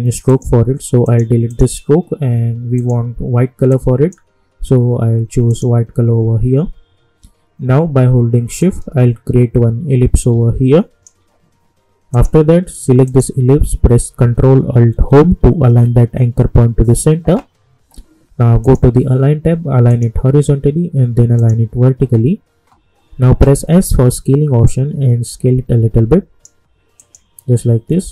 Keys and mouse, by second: 8.6-12.1 drag, 15.5 ctrl+alt+Home, 18.6 click, 23.6 s, 24.6-27.0 drag.